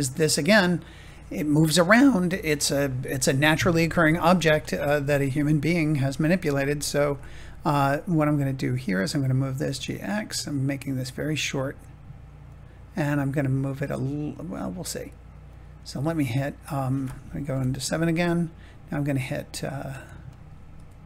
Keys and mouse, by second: 5.8 click, 6.2 middle click, 9.0 click, 9.6 g, 9.8 x, 12.4 click, 16.0 middle click, 17.4 KP_7, 20.7 r.